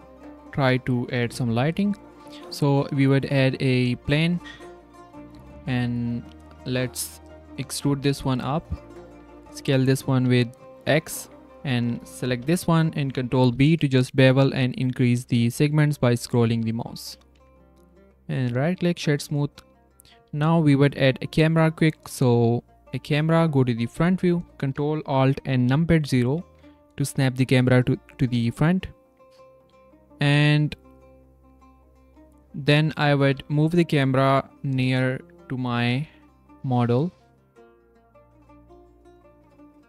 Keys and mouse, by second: 1.5 n, 1.7 click, 2.2 s, 3.9 shift+s, 4.5 Tab, 4.8 click, 5.9 click, 6.8 click, 7.6 e, 9.0 Tab, 9.4 s, 11.2 ctrl+Tab, 17.3 Tab, 17.6 click, 18.4 drag, 19.3 click, 19.8 click, 22.9 shift+click, 32.4 click, 32.6 drag, 33.2 g, 35.7 g, 39.3 g.